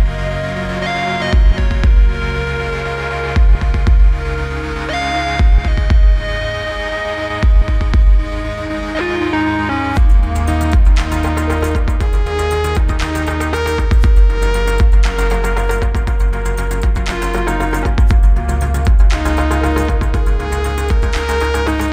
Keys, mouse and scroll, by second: 1.0 click, 2.4 click, 4.7 click, 6.7 click, 8.3 click, 11.5 click, 17.1 click, 18.6 Return, 20.4 click.